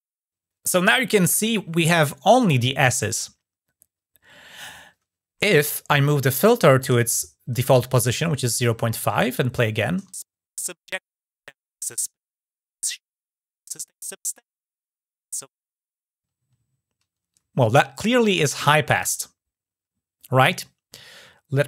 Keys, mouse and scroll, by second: 6.9 shift+click, 8.2 click, 21.5 click.